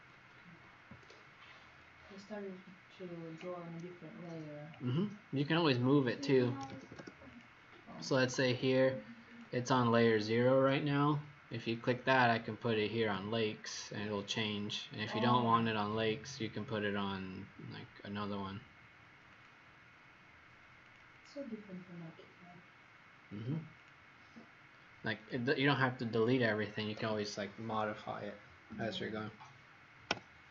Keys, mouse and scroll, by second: 6.3-7.2 typing, 7.2 click, 8.4 click, 21.1 click, 21.5 Escape, 23.7 click, 30.1 Delete.